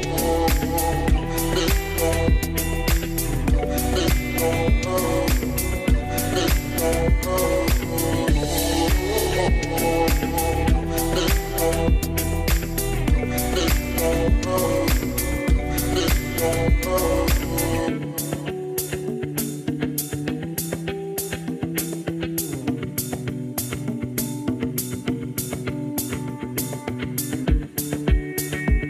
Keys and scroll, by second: 3.1 m, 16.5 m, 17.3 m.